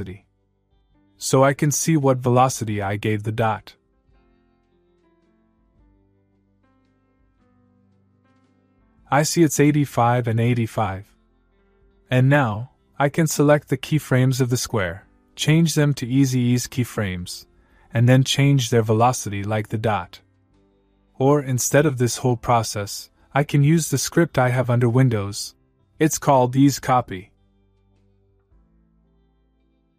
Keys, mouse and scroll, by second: 3.7 u, 5.5-7.0 click, 9.6 alt+click, 12.3 click, 14.5-15.9 click, 24.6 click, 27.2 click.